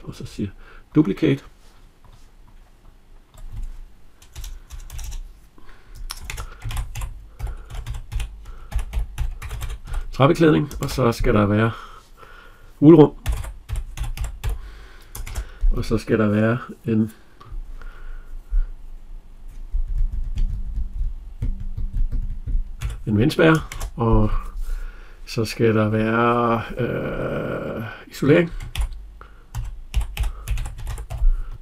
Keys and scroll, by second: 4.2 BackSpace.